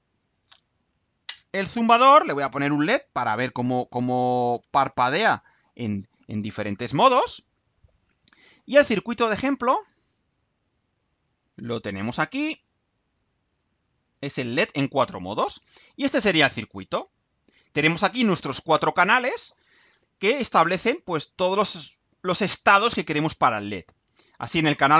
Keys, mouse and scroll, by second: 13.8 click, 15.3 right click, 16.0 scroll down 2, 16.8-18.3 right drag.